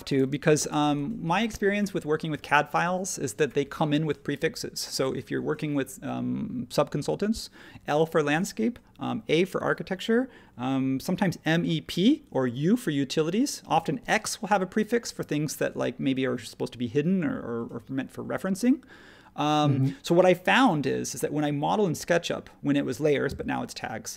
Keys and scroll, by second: 0.3 space.